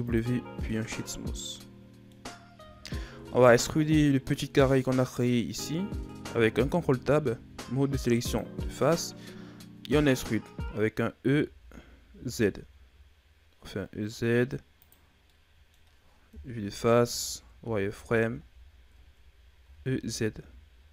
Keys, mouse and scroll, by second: 0.6-2.2 middle drag, 2.2-2.6 scroll up 2, 2.6-3.1 shift+scroll down 4, 3.1-3.9 scroll up 1, 3.9-6.6 middle drag, 6.6 ctrl+Tab, 8.7 right click, 9.3-11.1 scroll up 1, 11.2 e, 15.2-16.2 middle drag, 16.2 KP_1, 17.5 z, 17.9-18.6 shift+scroll up 4, 18.9-19.5 ctrl+scroll down 2, 19.5 e.